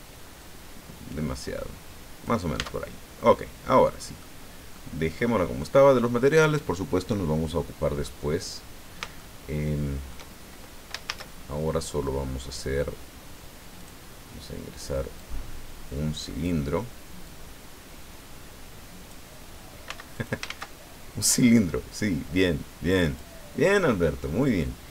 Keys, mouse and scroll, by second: 0.4-2.4 drag, 2.5 Tab, 2.8 scroll down 1, 3.1-4.4 middle drag, 4.7-5.8 middle drag, 7.1 scroll down 1, 8.0-10.3 middle drag, 11.0 shift+a, 13.8 click, 15.2-16.6 drag, 17.2-19.3 drag, 19.8 x, 20.1 click, 20.5 shift+a, 23.0 click.